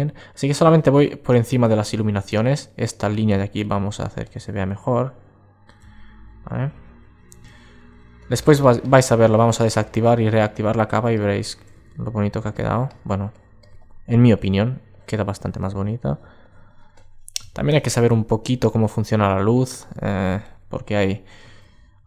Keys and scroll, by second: 21.6 alt+super+z.